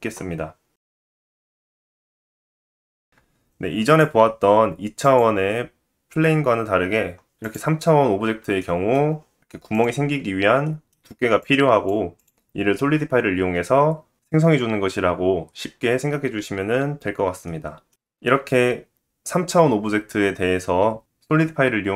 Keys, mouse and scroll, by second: 0.7 click, 2.2 shift+middle click, 2.7-3.0 scroll up 2, 3.1 middle click, 3.3 click, 7.6 middle click, 7.6-8.0 scroll up 3, 9.9 click, 11.9-14.4 middle drag, 14.4 click, 14.5-16.0 middle drag, 14.8-15.1 scroll up 2, 16.0-16.9 drag, 16.9-21.9 middle drag.